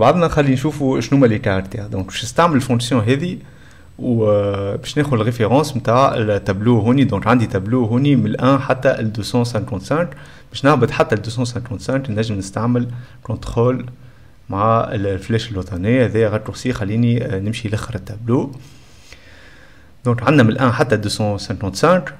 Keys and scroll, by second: 8.9 e, 12.5 s, 14.1 ctrl+Down, 16.8 d, 21.0-22.1 typing.